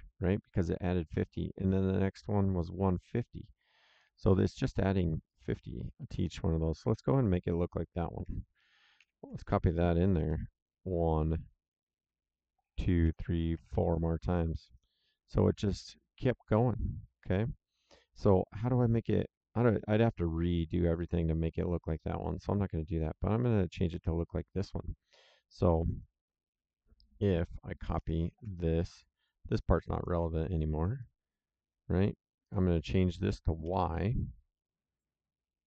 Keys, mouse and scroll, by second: 5.3 click, 8.5 ctrl+c, 8.9 ctrl+v, 12.5 ctrl+v, 14.5 click, 25.0 click, 27.9 ctrl+c, 28.1 ctrl+v, 28.9 click, 30.9 click, 32.4 click, 33.6 y, 35.3 click.